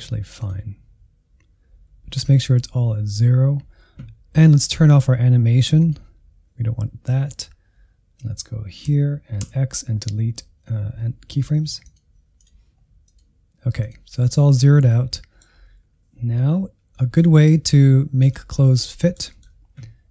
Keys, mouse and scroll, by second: 0.3-8.8 drag, 8.9 a, 9.4 x, 12.3-15.1 drag, 15.1-16.4 middle drag, 16.4 n, 16.8-17.2 scroll up 2, 17.2 shift+middle click, 18.2 click, 18.6-20.1 middle drag.